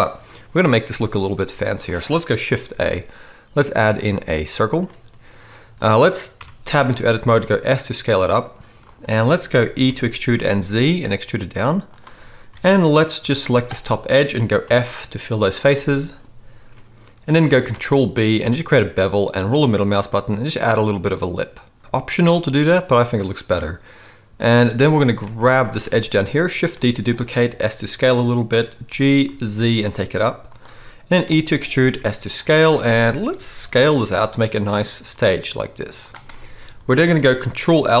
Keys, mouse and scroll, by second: 2.6 shift+a, 6.3 Tab, 7.1 s, 9.8 e, 12.5 alt+a, 13.4 shift+a, 13.6 shift+click, 13.7-17.4 shift+middle drag, 14.6 f, 17.8 ctrl+b, 25.2 alt+a, 25.8 shift+a, 25.9 click, 26.7 shift+d, 27.4 s, 28.8 g, 31.2 e, 32.9 middle click, 33.4 s, 36.2 middle click, 36.4-38.0 middle drag.